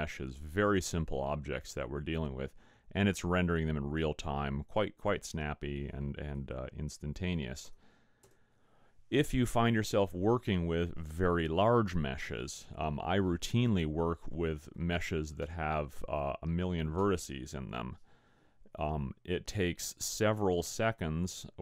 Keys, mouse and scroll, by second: 6.4 click.